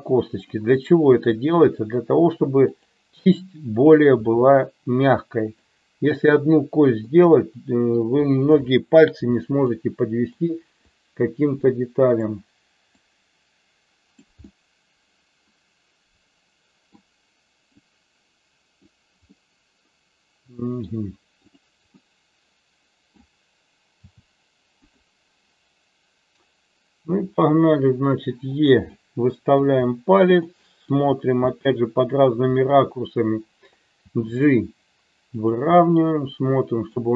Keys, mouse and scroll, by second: 1.1 e, 3.8 click, 4.2 e, 5.4 click, 7.1 middle click, 8.7 scroll up 1, 8.8 shift+middle click, 9.7 middle click, 10.9-12.3 drag, 13.1-14.2 drag, 14.4-16.9 middle drag, 17.9 click, 19.3-20.8 middle drag, 21.6 click, 21.9-23.2 middle drag, 24.0 g, 24.8 click, 27.2 e, 28.6 click, 28.9 middle click, 30.4 middle click, 31.5 middle click, 33.9 g, 35.3 click, 35.8-36.9 middle drag.